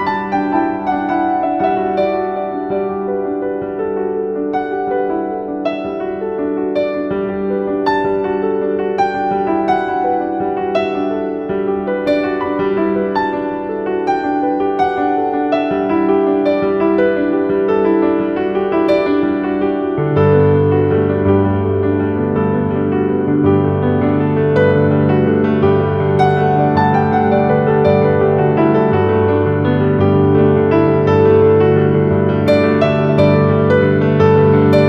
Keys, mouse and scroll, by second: 1.4 click, 3.7 right click, 4.4-10.6 drag, 10.6-12.3 typing, 10.8 click, 11.7 click, 12.0 click, 13.4 click, 14.3-20.3 shift+drag, 20.3-23.0 shift+drag, 23.0-24.5 typing, 23.3 click, 24.3 click, 24.7 click.